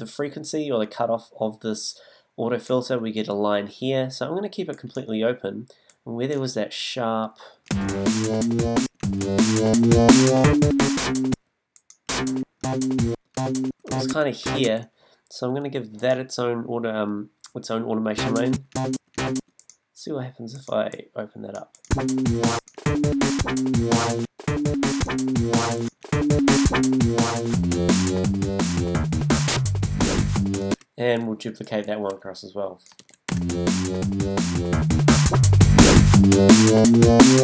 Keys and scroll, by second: 7.7 space, 8.8 space, 11.3 space, 18.1 space, 21.9 space, 24.2 space, 30.7 space, 33.3 super+space, 34.2 space.